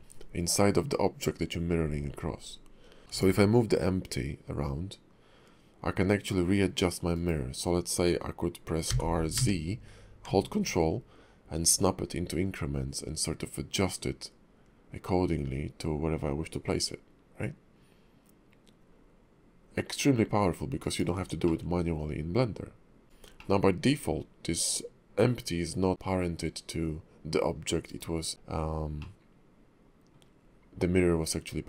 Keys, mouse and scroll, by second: 3.1 r, 8.8 r, 21.4 middle click, 23.4 middle click, 25.9 g, 29.0 middle click.